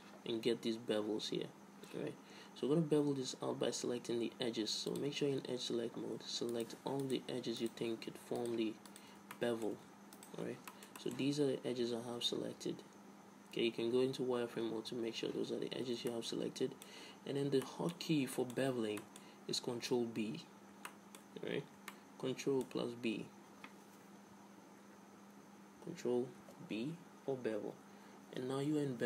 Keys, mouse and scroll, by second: 2.7-4.7 middle drag, 5.2-7.1 drag, 7.1-10.8 right drag, 10.8-12.5 drag, 11.5 z, 14.0-16.0 typing, 16.4-24.1 middle drag, 26.7 ctrl+b.